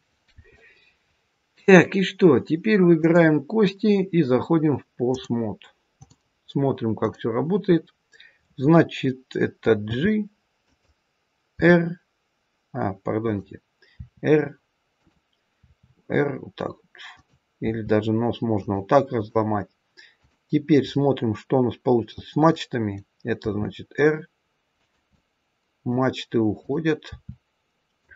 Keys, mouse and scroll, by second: 1.2-1.7 scroll up 1, 2.9 click, 5.0 click, 6.9 click, 9.8 g, 11.4 e, 13.1 click, 13.9 r, 14.8 click, 15.6 r, 17.6 r, 19.0 click, 20.1 click, 20.8 middle click, 22.4 middle click, 23.4 r, 25.0 middle click, 26.5 click, 27.0 r.